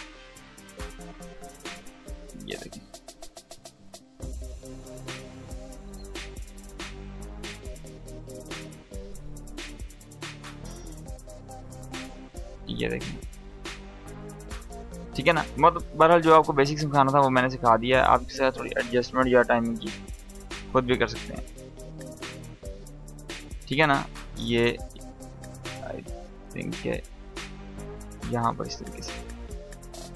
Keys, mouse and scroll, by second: 2.0 space, 4.7-5.3 click, 5.8 space, 8.5-9.1 drag, 10.9 space, 12.4 click, 12.7 space, 14.3-15.2 drag, 16.6 Delete, 17.7-18.6 drag, 24.9 ctrl+z, 25.2-26.5 drag, 29.2 space.